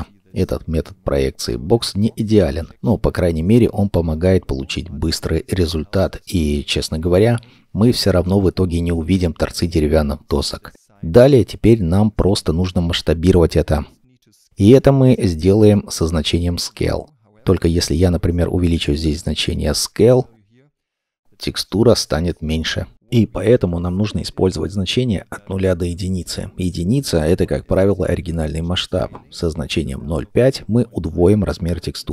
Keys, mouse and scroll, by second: 3.3-4.7 scroll down 1, 7.6-10.5 scroll up 1, 13.3 middle click, 18.5 1, 18.9 Return, 20.7 middle click, 21.3 scroll up 1, 27.6 1, 27.9 Return, 29.5 0, 29.6 ., 29.8 5, 30.2 Return, 31.7-32.1 scroll down 1.